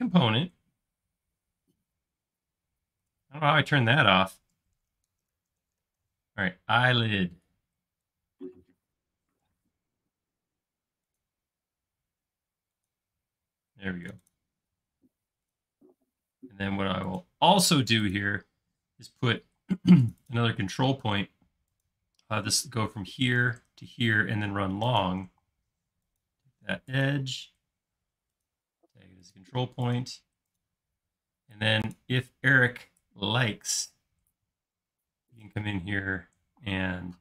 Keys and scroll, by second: 4.7-6.5 typing, 9.5 |, 14.7 i, 17.7-18.5 typing, 19.6 space, 20.8 typing, 25.4 shift+space, 36.5 q.